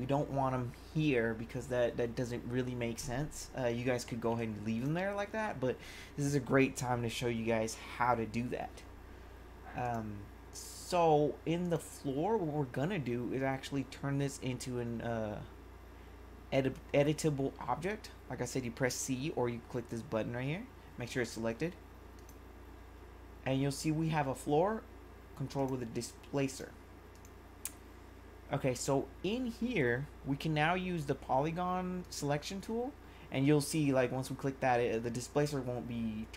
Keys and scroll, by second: 4.3 1.